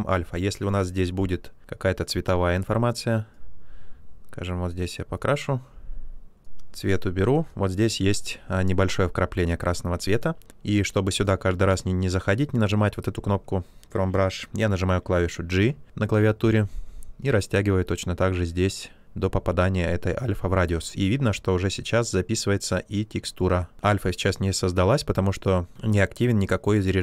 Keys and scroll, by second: 15.8 g.